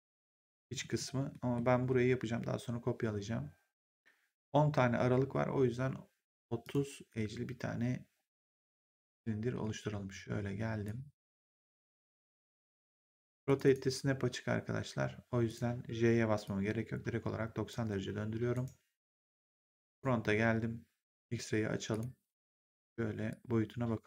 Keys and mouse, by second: 1.2 middle click, 6.5 click, 8.9 click, 9.4 w, 10.8 click, 12.1 e, 13.4 click, 15.4 click, 18.4 right click, 19.3 click, 21.8 click, 22.2 w, 23.2 click.